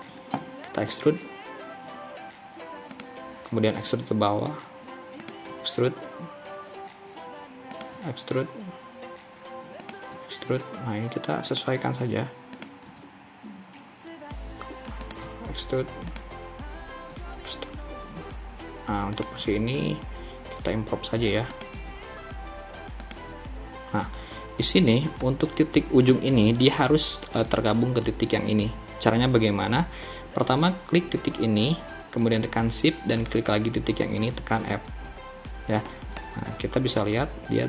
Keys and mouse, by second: 1.0 e, 5.6 e, 8.0 e, 10.2 e, 11.9 e, 13.0 e, 15.4 e, 17.2 e, 19.5 e, 21.8 e, 23.4 e, 25.2 middle click, 35.0 f, 35.9 middle click, 36.6 KP_3.